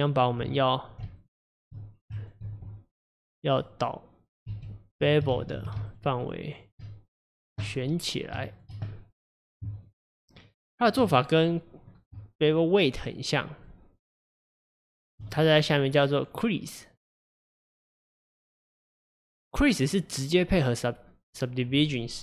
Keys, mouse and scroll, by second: 1.2 shift+click, 2.2 ctrl+click, 2.9 shift+click, 3.2 shift+click, 3.6 shift+click, 4.5 shift+z, 5.4 ctrl+z, 5.9 shift+click, 6.2 shift+click, 6.5 shift+click, 7.4 click, 8.6 shift+click, 8.9 middle click, 9.8 shift+click, 10.4 shift+click, 10.8 shift+click, 11.2-11.5 scroll down 1, 11.5 middle click, 12.5 shift+click, 13.1 shift+click, 13.6 shift+click, 14.1 shift+click, 14.6 shift+click, 15.0 shift+click, 15.3-17.0 middle drag, 17.0-20.0 drag.